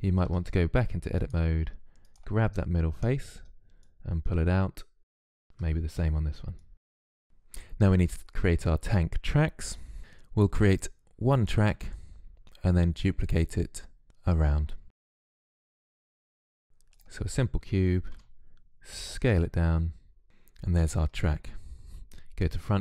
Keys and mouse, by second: 0.1 Tab, 3.6-5.0 middle drag, 5.0 click, 5.6 Tab, 5.8 Tab, 7.1 Tab, 7.2 KP_3, 14.8 click, 14.9 shift+a, 15.9 s, 17.0 s, 18.0 click, 18.6 s, 19.3 click, 19.9 s, 20.6 click, 21.8 KP_1, 22.3 click.